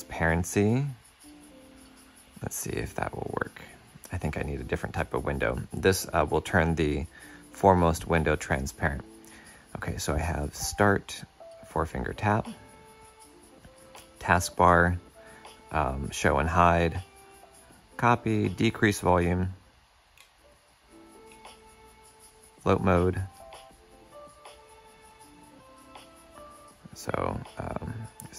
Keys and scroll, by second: 23.2 shift+super+f.